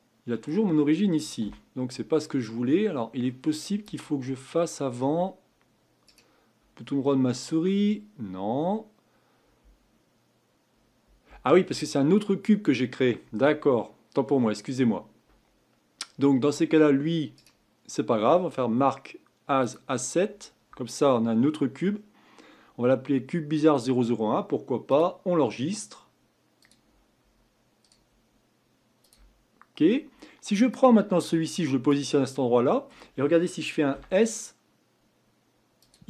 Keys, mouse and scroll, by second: 1.4 Delete, 3.2-3.8 middle drag, 3.8 click, 4.5-6.0 middle drag, 6.0-9.2 right drag, 17.4-20.4 right drag, 24.9-28.0 drag, 30.7-31.9 drag, 32.3-33.9 middle drag, 33.9 s.